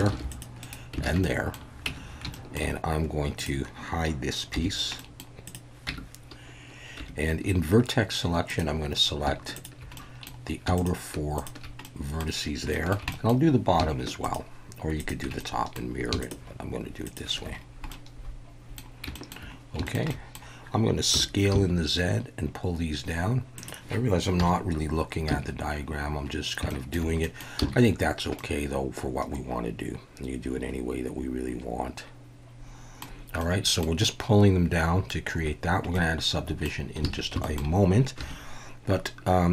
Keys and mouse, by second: 0.1 ctrl+r, 0.6 right click, 1.1 alt+a, 1.2-1.5 middle drag, 1.9 Tab, 2.3 shift+middle click, 4.6 h, 5.0 middle click, 5.9 Tab, 7.0 1, 8.5 click, 10.0 middle click, 11.8 middle click, 12.7 shift+middle click, 13.2 middle click, 15.0 shift+click, 15.4 middle click, 16.2 shift+click, 17.0 shift+click, 17.9 middle click, 19.1 shift+middle click, 19.8 shift+middle click, 20.1 shift+middle click, 21.1 s, 21.5 z, 23.6 click, 24.4 KP_1, 25.3 z, 26.7 shift+middle drag, 27.2 middle click, 27.6 z, 28.4-33.0 middle drag, 33.4-33.8 middle drag, 35.9-36.7 middle drag, 37.1 alt+a, 37.4 shift+middle click, 38.2 2.